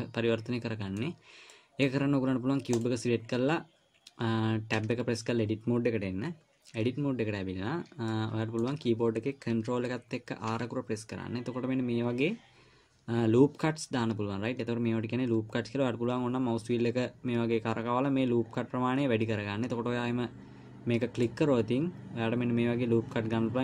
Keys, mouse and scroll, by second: 0.3 middle click, 3.1 click, 5.5 Tab, 8.5 middle click, 10.9 ctrl+r.